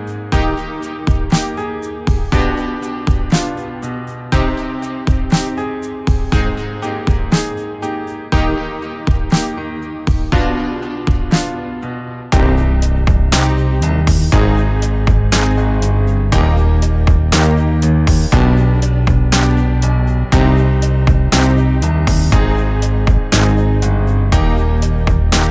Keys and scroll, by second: 0.2 Delete, 0.6 ctrl+z, 1.4 ctrl+z, 3.9-5.0 Left, 6.6 Left, 7.6 Left, 7.6 Left, 7.6 Left, 11.7 Delete, 11.9 Delete, 12.0 ctrl+z, 14.5 ctrl+z, 21.1 ctrl+i, 23.9 ctrl+z.